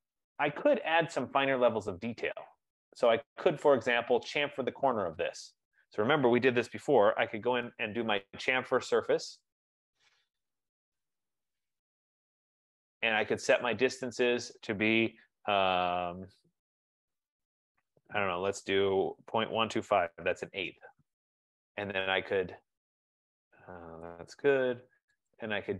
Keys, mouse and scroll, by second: 1.3 right click, 1.4-1.8 scroll, 2.3-3.1 scroll, 7.2-7.5 typing, 9.9 Down, 10.1 Down, 10.5 Down, 10.6 Down, 12.1 shift+Return, 14.2 click, 19.3-20.7 typing, 24.3 Return.